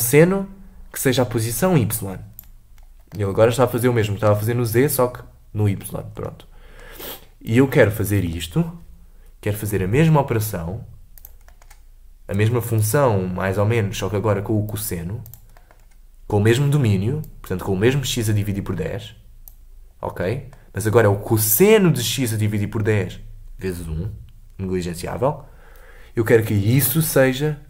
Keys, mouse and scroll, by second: 0.9-2.7 drag, 3.1-6.1 middle drag, 6.2-7.5 middle drag, 7.5-9.7 drag, 9.7 shift+d, 11.5-12.8 middle drag, 12.8-15.3 drag, 15.6 middle click, 15.7-16.1 scroll down 2, 17.3-20.2 drag, 20.2-23.2 middle drag, 27.0 click.